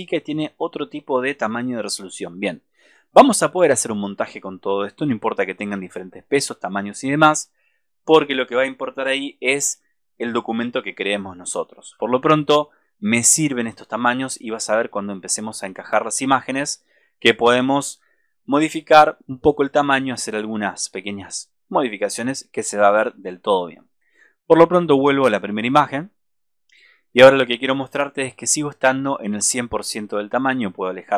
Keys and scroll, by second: 12.0 super+-.